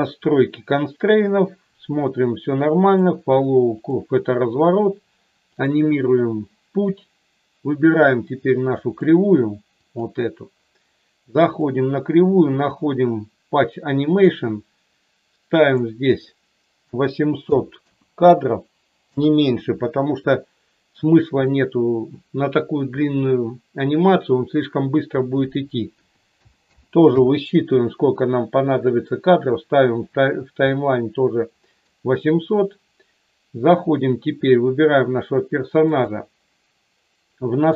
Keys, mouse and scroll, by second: 2.9 click, 3.8 click, 5.5 click, 8.9 click, 9.9 click, 14.0 click, 15.7-19.7 drag, 21.3-27.5 drag, 26.6 KP_0, 30.6-31.9 middle drag, 35.9 click.